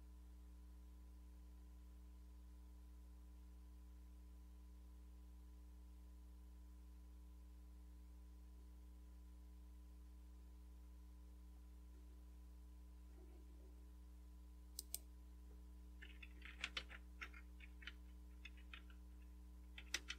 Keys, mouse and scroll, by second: 1.7-3.2 scroll up 1, 14.8 click, 16.1-17.2 typing, 17.8 Tab, 18.5-20.1 typing.